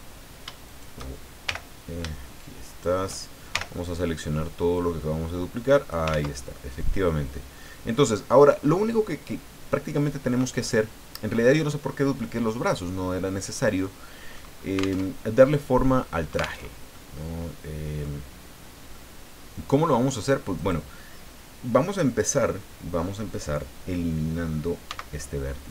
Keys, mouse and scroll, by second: 0.7 shift+right click, 1.4 shift+l, 2.7 shift+right click, 3.5 shift+l, 4.7-6.1 drag, 6.1 ctrl+z, 6.5-8.3 ctrl+middle drag, 8.6-8.9 scroll up 2, 10.8 scroll down 2, 13.8 middle click, 14.7 alt+scroll up 2, 15.0 alt+Tab, 16.6 alt+Tab, 16.9-18.2 alt+middle drag, 18.9-19.9 middle drag, 20.5 right click, 24.9 x.